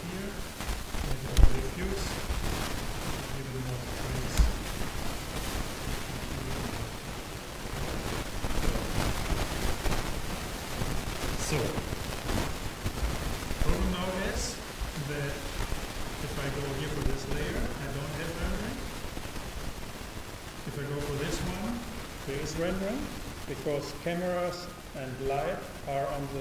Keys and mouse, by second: 3.5-5.1 drag, 16.1-18.0 drag, 20.9-23.0 drag.